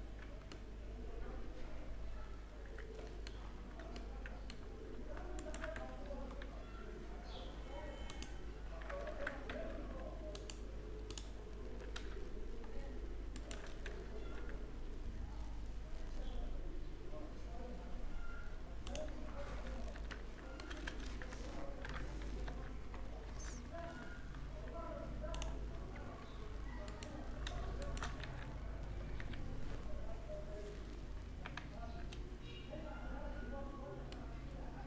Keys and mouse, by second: 1.1-2.5 middle drag, 3.5-4.9 middle drag, 5.4 w, 8.7 ctrl+z, 9.1 w, 13.0 click, 13.6 w, 19.1 Tab, 20.3 a, 20.5 a, 21.5 ctrl+n, 22.1 Tab, 22.9 Tab, 26.3 click, 26.7-31.0 right drag, 27.8 w, 33.4-34.8 middle drag.